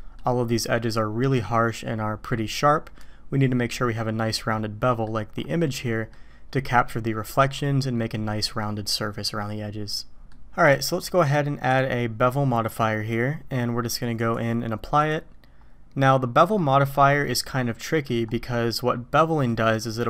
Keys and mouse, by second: 4.5 click, 6.0 click, 10.1 middle click, 10.6 click, 14.4-15.1 drag, 16.1-16.6 middle drag, 17.3-18.1 middle drag, 19.4 middle drag.